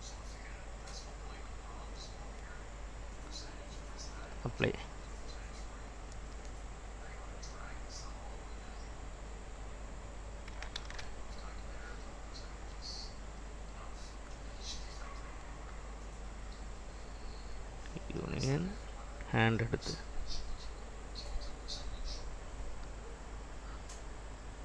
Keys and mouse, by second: 3.9-8.9 drag, 9.6 click, 11.0 ctrl+s, 13.7-16.4 drag, 17.7 drag, 18.4 click, 19.3-23.2 drag.